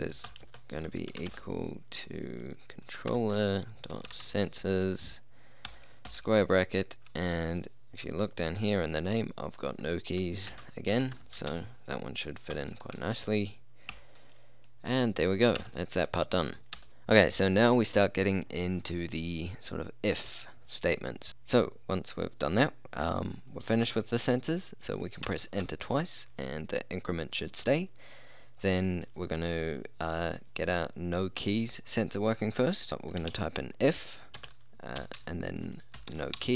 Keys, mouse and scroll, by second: 0.2-1.7 typing, 3.2-4.7 typing, 6.1 shift+', 10.5-11.5 typing, 12.6 shift+', 15.6 Return, 16.8 Return, 21.3 BackSpace, 25.3 Return, 25.7 Return, 33.3 i, 34.4-36.4 typing.